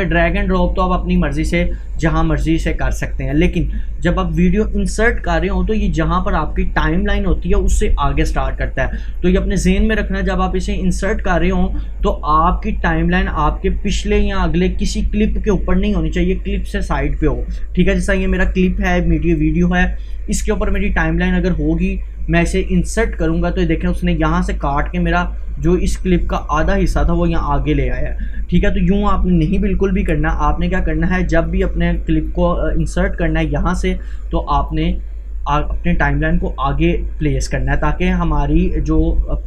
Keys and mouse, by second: 4.2 Delete, 5.4-9.1 drag, 9.1-20.7 drag, 22.9 click, 29.7 ctrl+Num_Lock, 29.7 click, 29.9 ctrl+z, 31.6-39.4 drag.